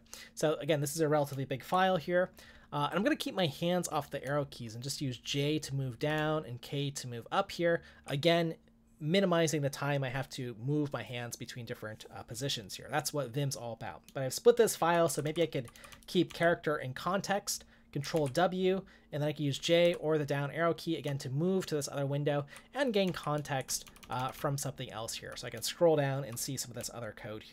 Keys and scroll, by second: 1.3 j, 4.7-6.2 j, 6.2-6.9 k, 14.6 j, 18.1 ctrl+w, 18.1 j, 19.8 j, 21.1 j, 21.6 j, 21.7-26.8 j, 26.8-27.5 k.